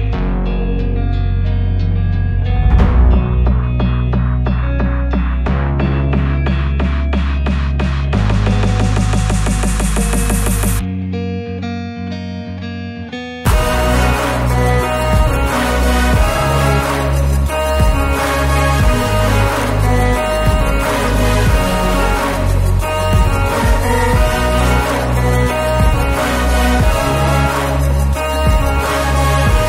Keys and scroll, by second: 1.7 m, 3.5 Left, 4.8 space, 5.7 m, 6.6 Up, 8.0 Return, 9.3 e, 11.8 Return, 12.2 space, 13.4 m, 14.1 Up, 15.5 Return, 17.5 Up, 18.7 Return, 19.1 space, 19.7 p, 20.9 Return, 24.8 l.